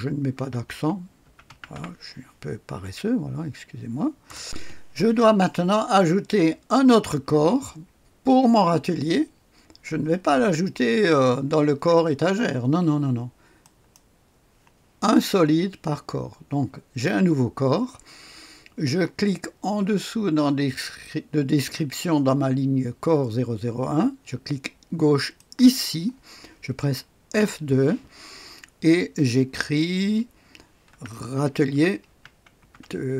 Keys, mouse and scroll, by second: 0.0-2.2 typing, 4.2 Return, 4.4 click, 13.6 click, 25.3 click, 27.3 F2, 30.9-33.1 typing.